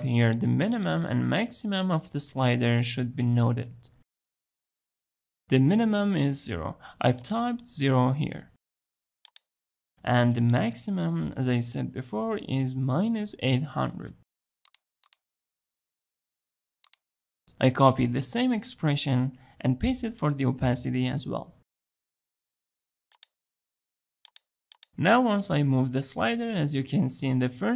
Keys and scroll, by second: 18.5 ctrl+c, 22.1 ctrl+v, 22.9 ctrl+v.